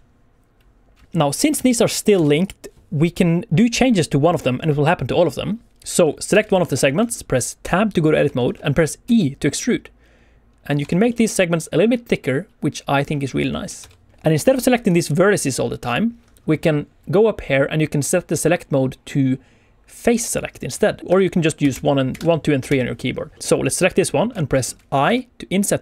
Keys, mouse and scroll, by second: 1.0 Tab, 1.0 alt+z, 1.0 middle click, 1.0 scroll down 2, 1.5 alt+z, 2.1 alt+a, 2.4 click, 5.9-6.2 scroll up 2, 6.3 alt+a, 6.4 click, 6.8 shift+middle click, 7.0 scroll down 1, 7.6 Tab, 8.3 shift+middle click, 9.0 e, 10.6 click, 10.8 Tab, 11.0 middle click, 13.0 scroll down 1, 13.2 scroll up 2, 13.4 shift+middle click, 13.8 Tab, 13.9 click, 14.2 middle click, 14.8 click, 15.3 click, 15.8 click, 21.0 click, 21.0-22.7 typing, 23.3 click, 23.3 shift+middle click, 23.3 scroll up 2, 23.5 middle click, 24.2 scroll up 1, 24.6 middle click, 25.0 i.